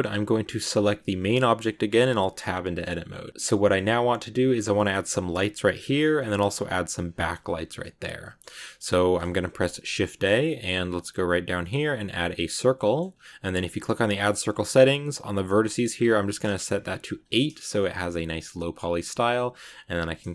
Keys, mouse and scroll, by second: 0.2 right click, 0.9 middle click, 1.9 Tab, 3.3 middle click, 3.6-5.7 scroll up 2, 5.7 scroll down 2, 5.9 middle click, 6.4-7.1 scroll up 2, 7.1 middle click, 7.4 a, 7.7-9.4 middle drag, 9.4 shift+a, 12.7-13.8 middle drag, 13.8-17.1 drag, 19.8 click, 20.1-20.3 middle drag.